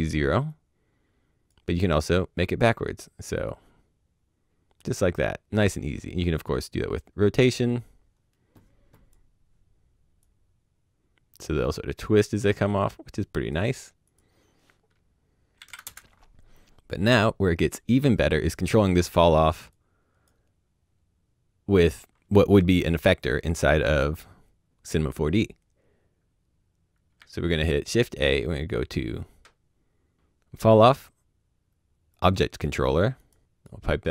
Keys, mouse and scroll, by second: 0.4 click, 3.4 click, 6.3 click, 15.8 KP_Enter, 19.7 click, 27.0 click, 27.1 shift+a, 32.1 click, 33.5 click.